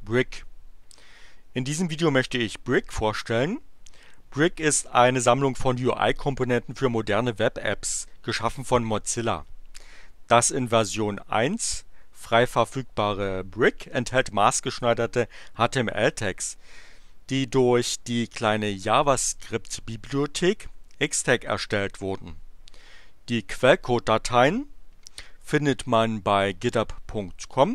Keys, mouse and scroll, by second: 19.6 click, 26.4 click.